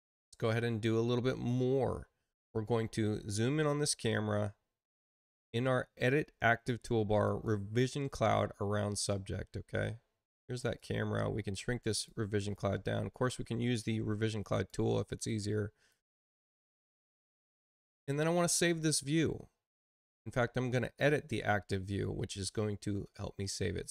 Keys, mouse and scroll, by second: 0.3 click, 7.2 click, 10.7-12.0 drag, 11.8 right click, 14.4 click, 15.2 click, 20.9 click.